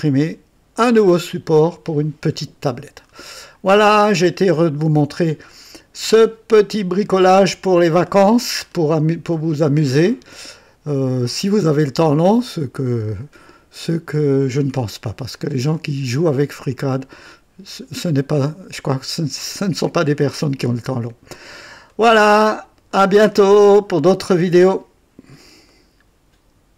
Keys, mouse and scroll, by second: 0.0-0.8 typing, 1.9-3.3 typing, 4.5 right click, 5.5-6.9 drag, 7.1-8.9 drag, 9.3-13.5 drag, 9.9 typing, 14.4-16.2 drag, 16.1-19.2 typing, 16.3 right click, 17.2-18.8 drag, 20.7 click, 21.8 click, 22.9 right click, 23.2-24.3 typing, 23.5 click, 25.6 right click, 26.0 typing.